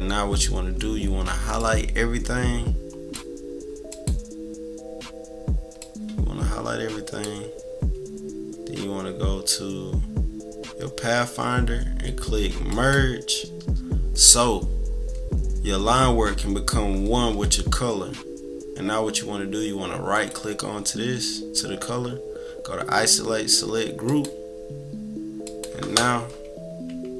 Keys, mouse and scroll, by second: 1.5-3.1 drag, 3.9-4.5 drag, 5.8-12.2 drag, 12.6 click, 20.1 click, 24.1 click, 25.4 click.